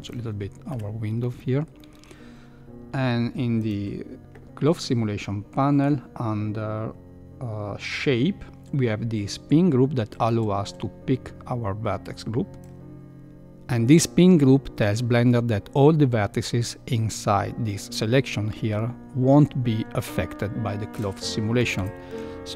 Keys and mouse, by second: 0.7 KP_1, 1.3 shift+middle drag, 1.7 shift+middle click, 10.1 click, 21.8 shift+Left.